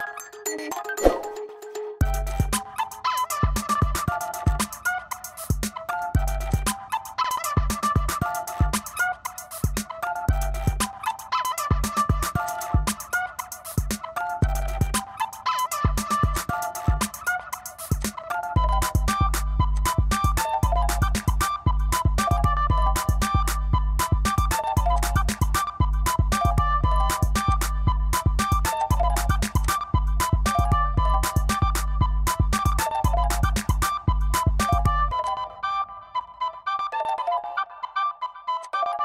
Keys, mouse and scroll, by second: 0.8 click, 2.4 click, 4.0 right click, 4.5 click, 7.9 click, 8.1 middle click, 11.1 click, 11.9 click, 12.5 click, 14.5 click, 16.4 click, 18.0 click, 19.8 click, 25.0 click, 27.5 click, 28.8 click, 29.7 click, 37.5 click, 38.7 click.